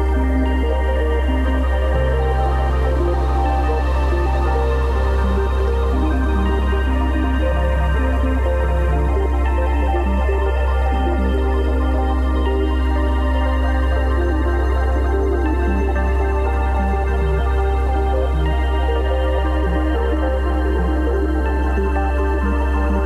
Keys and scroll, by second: 4.4 super+c, 4.7 super+v, 5.7 v, 6.0 super+t, 6.7 alt+super+t, 12.7 b, 13.7 ], 16.2 x, 17.5 0, 22.7 v.